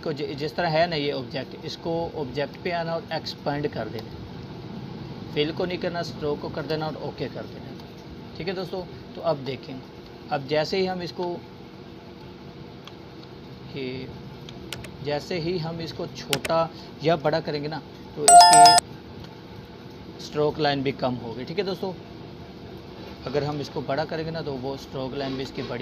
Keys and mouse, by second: 3.6-3.9 drag, 6.7-7.3 alt+drag, 8.0-8.9 alt+drag, 10.7 drag, 12.5-13.7 alt+shift+drag, 16.9-17.5 drag, 18.7-20.0 alt+shift+drag, 24.4 ctrl+z.